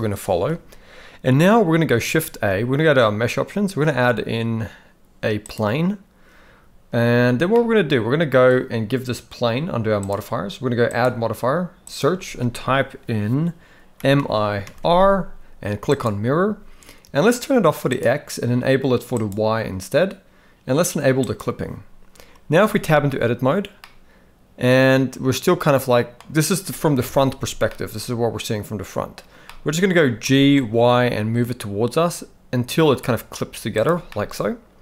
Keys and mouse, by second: 2.3 shift+a, 7.5-8.5 middle drag, 10.0 click, 11.0-16.0 drag, 17.9 click, 19.1 click, 21.2 click, 22.7 Tab, 23.8-26.1 middle drag, 27.0 KP_1, 27.7-29.1 middle drag, 29.5 middle click, 30.3 g, 34.1-34.8 middle drag.